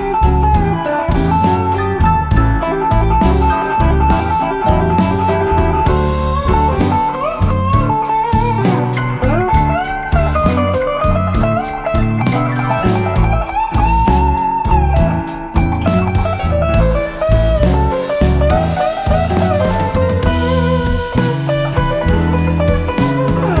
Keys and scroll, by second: 1.8 typing, 5.2-5.9 typing, 11.5 4, 20.4 5.